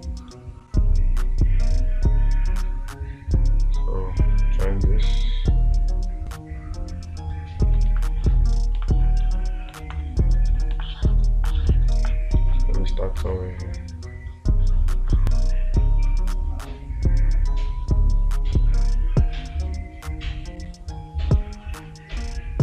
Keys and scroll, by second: 8.3 space, 10.3 space.